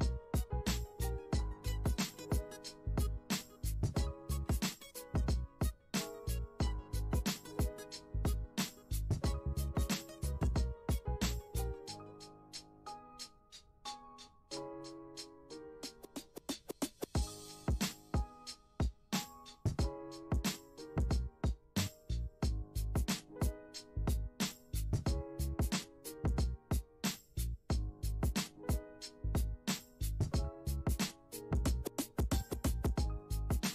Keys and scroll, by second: 4.4 F1, 23.7 ctrl+t.